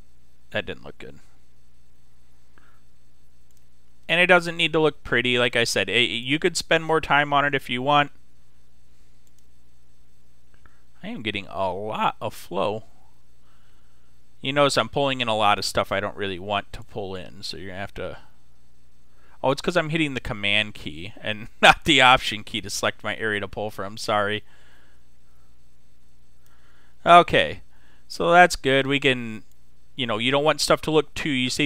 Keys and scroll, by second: 0.4 super+z, 2.1 s, 20.6 super+z.